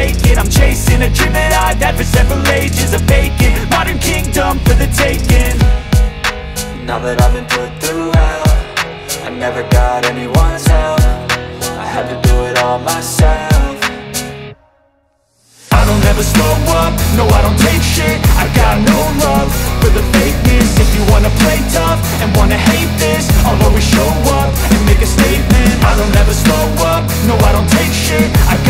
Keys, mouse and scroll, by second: 0.8 click, 2.6 click, 4.0 click, 8.5 click, 11.9-12.7 scroll, 14.2 scroll, 19.6 click, 19.9 middle click, 20.7-21.9 scroll, 20.9 click, 22.0 click, 22.2 click, 22.4 click, 22.6 click, 22.8 click, 23.0 click, 23.2 click, 23.4 click, 23.6 click, 23.8 click, 24.0 click, 24.2 click, 24.4 click, 26.3 click, 26.7 click.